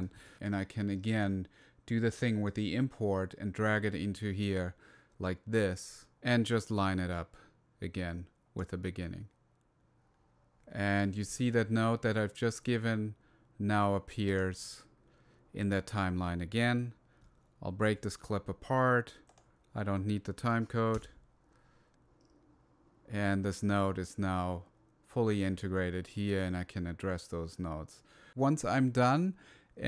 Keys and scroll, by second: 9.5 =, 10.6 -, 18.2 shift+super+g, 21.3 BackSpace.